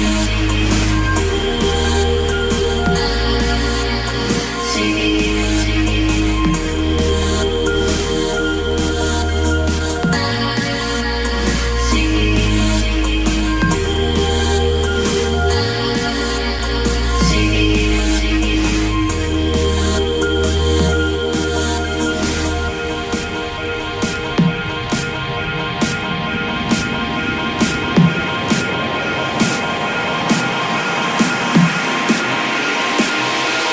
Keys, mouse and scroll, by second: 4.3 KP_1, 4.5 KP_2, 4.8 KP_0, 10.7-24.6 drag, 30.6 Delete, 32.6 click, 33.1 Delete.